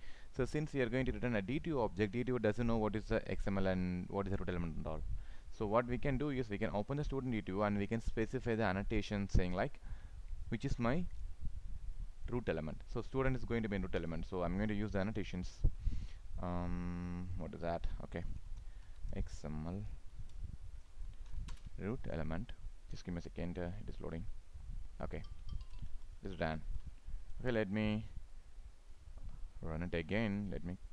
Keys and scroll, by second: 21.5 ctrl+space, 25.6 ctrl+s.